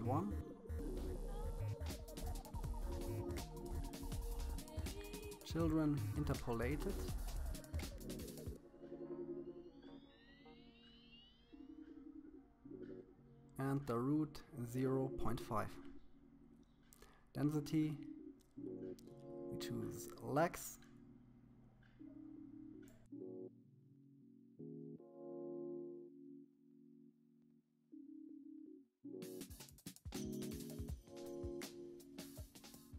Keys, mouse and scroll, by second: 2.0-3.8 scroll down 13, 5.7 click, 7.5-9.1 scroll down 10, 9.1 scroll down 1, 9.4-10.9 drag, 14.9-16.0 scroll down 6, 16.0-17.6 drag, 24.1 shift+middle click, 24.6 click, 26.2 click, 27.4 click, 28.7 KP_3, 29.0 click, 30.5 click, 32.0 KP_3.